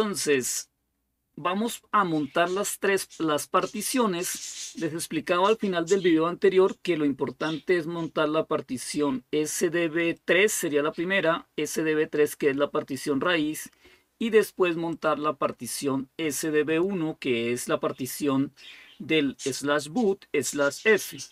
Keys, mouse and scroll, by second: 6.6-9.4 drag, 9.9-21.3 drag.